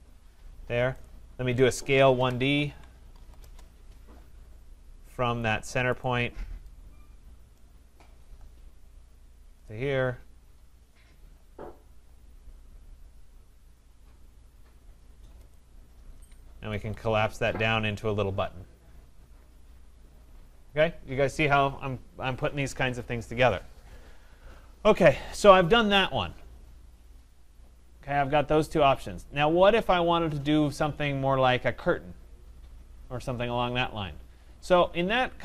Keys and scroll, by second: 16.6 Escape.